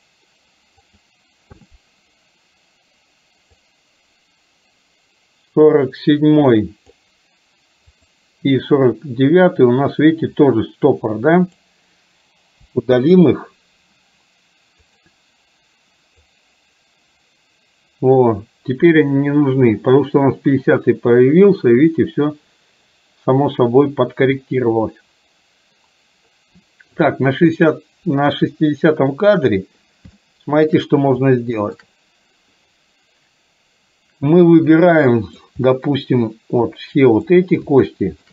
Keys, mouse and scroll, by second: 1.0 click, 3.6-7.1 drag, 8.1 click, 11.0 click, 12.7 Delete, 14.8 click, 16.5-27.1 drag, 30.2 shift+middle click, 31.5 shift+middle click, 34.7 middle click, 35.7 middle click, 36.8 click, 38.0 shift+middle click.